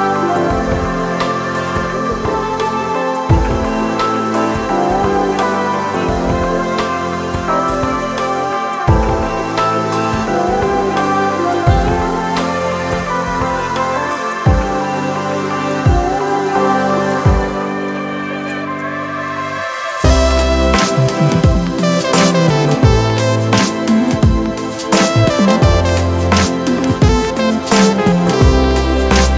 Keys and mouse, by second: 2.2 ctrl+right click, 4.0 ctrl+click, 5.1-11.6 ctrl+drag, 12.3 ctrl+click, 15.4 ctrl+click, 17.0 ctrl+click, 17.7 ctrl+=, 19.2-21.8 drag, 23.0 click, 24.7-26.3 drag, 29.0-29.3 drag.